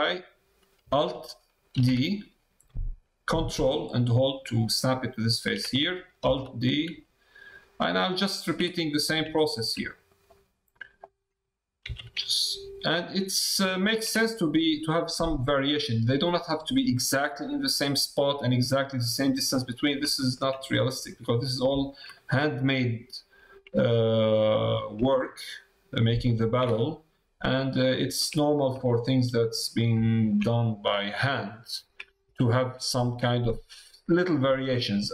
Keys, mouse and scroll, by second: 6.2 alt+d, 8.7 middle click, 9.4 shift+middle click, 10.1 middle click, 11.0 click, 14.1 middle click, 19.6 middle click, 20.1 shift+middle click, 21.1 shift+middle click, 21.8 shift+click, 22.1 click, 23.8 middle click, 25.3 ctrl+g, 26.8 middle click, 27.7 middle click, 28.4 shift+middle click, 28.8 middle click, 30.1 shift+middle click, 30.4 middle click, 32.3 shift+middle click, 34.3 middle click.